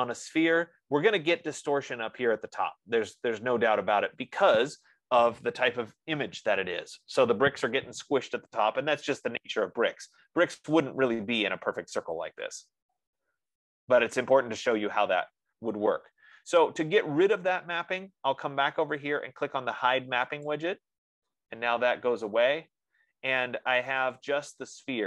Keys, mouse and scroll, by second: 9.9-10.7 scroll, 14.2-14.6 scroll, 21.0 click, 24.6 click.